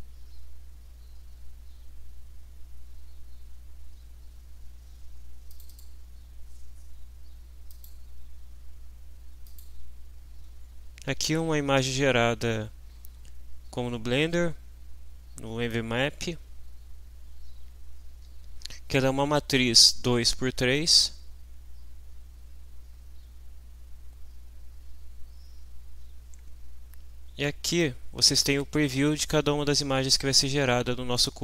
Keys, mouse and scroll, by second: 0.8-1.2 scroll down 1, 1.4-1.7 scroll down 2, 1.9-2.6 scroll down 4, 2.9-4.5 scroll down 6, 5.5 click, 7.7 click, 9.5 click.